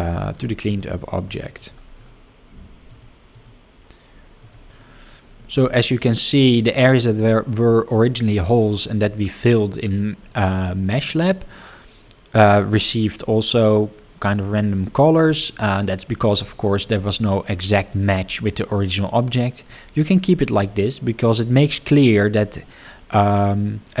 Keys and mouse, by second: 0.7-1.1 middle drag, 1.3 shift+middle drag, 2.8 click, 3.3 click, 4.4 click, 6.1-6.5 middle drag, 6.8 shift+middle drag, 9.4-9.9 middle drag, 12.0-12.5 middle drag, 16.5 shift+middle drag, 17.1 middle drag, 19.7-20.0 middle drag.